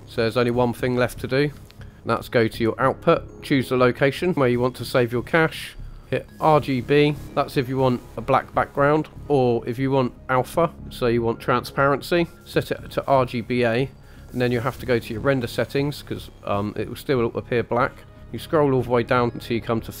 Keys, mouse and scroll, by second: 0.0 shift+middle click, 0.0-0.6 scroll down 2, 0.6 click, 1.1 shift+middle drag, 1.3 shift+click, 1.9-3.3 drag, 4.1 click, 6.5 click, 12.3 click, 14.0 click, 15.8 click, 17.9-18.9 scroll down 8.